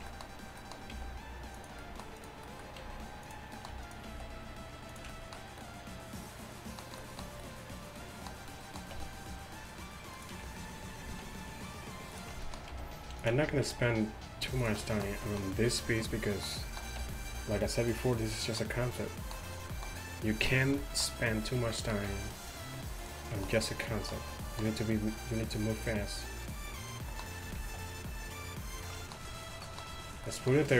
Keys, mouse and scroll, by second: 1.0 g, 2.7-3.7 drag, 2.9 g, 4.2 alt+s, 9.0 e, 11.1 alt+s, 12.8 g, 13.5 alt+s, 17.1 r, 20.0-22.1 middle drag, 22.1 g, 26.5-28.8 right drag, 27.6 alt+s, 29.4-30.5 right drag.